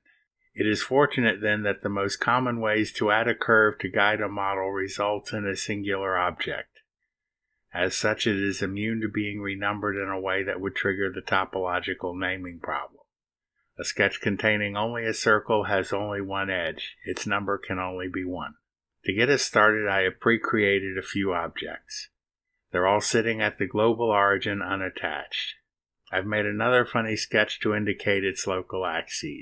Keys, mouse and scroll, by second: 26.8 scroll up 2, 27.7 click.